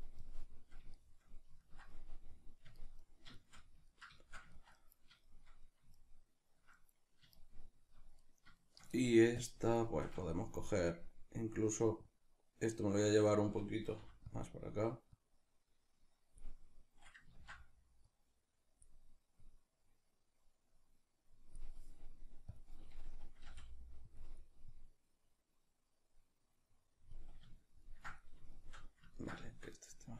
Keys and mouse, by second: 12.1-14.4 drag, 14.0 f, 14.5 middle click, 15.1-23.5 drag, 17.4 ctrl+z, 23.5 f, 24.2 click, 27.6-30.1 ctrl+middle drag.